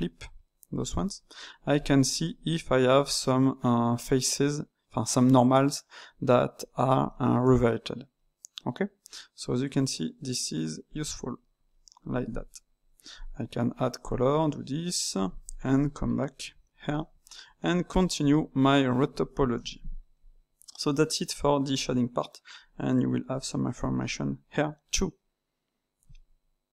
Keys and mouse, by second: 0.7 click, 1.3 middle click, 2.2-5.1 middle drag, 6.6-10.9 middle drag, 10.9 click, 11.6-13.1 middle drag, 13.1-14.0 drag, 16.2 KP_Divide, 16.9-18.2 middle drag, 18.2 Tab, 18.8-20.1 shift+middle drag, 20.1 click, 21.7-24.7 drag, 24.9-26.8 middle drag.